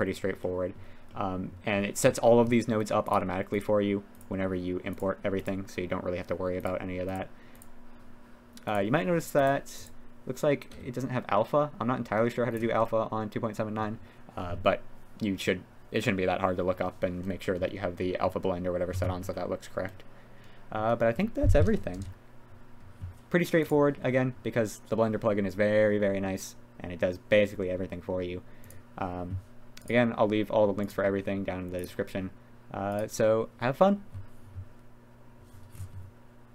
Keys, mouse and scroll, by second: 30.9-36.5 drag.